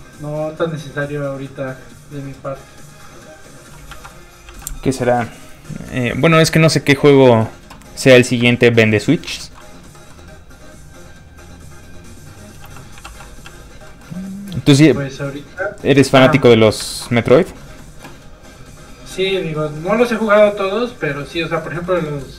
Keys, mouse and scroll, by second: 1.1 click, 3.9 ctrl+z, 4.6 click, 4.6 f, 9.0 middle click, 9.2 shift+middle click, 9.7 shift+middle click, 9.7-10.4 shift+scroll up 1, 10.4 click, 10.4 middle click, 12.6 f, 12.7 click, 13.2 f, 13.3 click, 13.4 f, 13.6 click, 13.8 middle click, 14.2 click, 15.9 f, 16.0 click, 16.3 middle click, 16.5 f, 16.6 click, 16.8 shift+middle click, 17.1 middle click, 17.2 scroll up 1, 17.3 middle click, 18.9 click, 19.7 f, 19.9 click, 21.3 middle click, 22.0 shift+middle click.